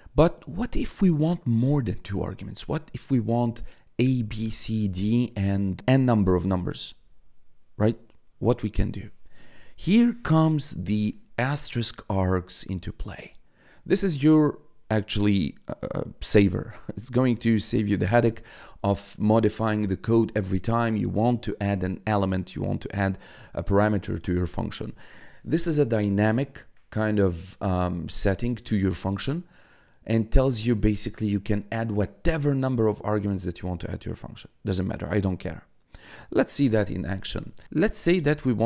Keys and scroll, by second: 3.2 1, 7.0 1, 9.7 *, 10.0 a, 10.6 s, 12.3 1, 36.7-38.6 typing.